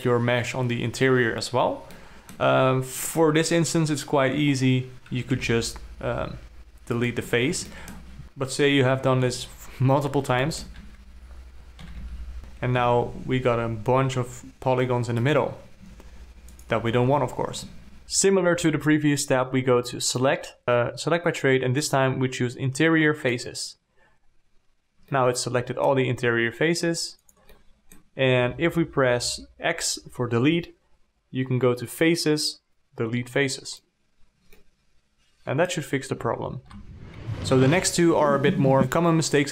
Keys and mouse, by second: 2.4 alt+middle click, 5.8 x, 8.1 alt+middle click, 8.2-9.9 typing, 8.5 alt+f, 8.5 alt+click, 9.0 alt+click, 9.9 alt+click, 10.6 ctrl+alt+click, 10.7 alt+a, 11.4 alt+a, 11.7 click, 12.3 f, 12.5 alt+a, 13.2 3, 16.3 g, 18.2 alt+a, 20.5 click, 25.5 alt+middle click, 26.5 g, 27.9 alt+middle click, 28.9 x, 35.0-36.1 alt+middle drag, 36.5 z, 36.9 z, 38.5 alt+a.